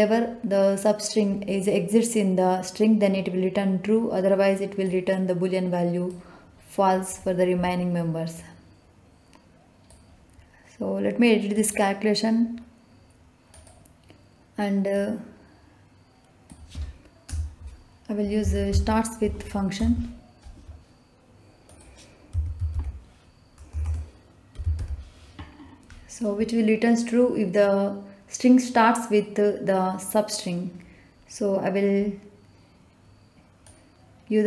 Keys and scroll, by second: 17.2 BackSpace, 18.4 s, 18.6 t, 18.7 a, 19.7 Return, 22.3-24.7 typing.